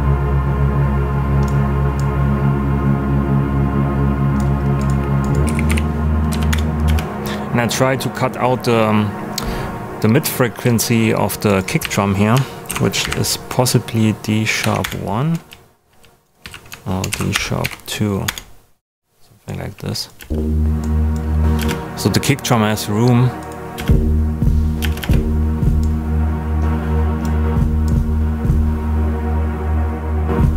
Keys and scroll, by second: 5.2-6.8 typing, 6.2 Down, 6.4 Return, 11.8 super+a, 12.3 shift+super+a, 12.6 shift+super+d, 14.6 i, 14.8 Return, 15.4 super+Return, 16.4 super+a, 17.1 shift+super+d, 17.3 shift+#, 17.6 2, 18.2 Return, 20.1 space, 23.7 space.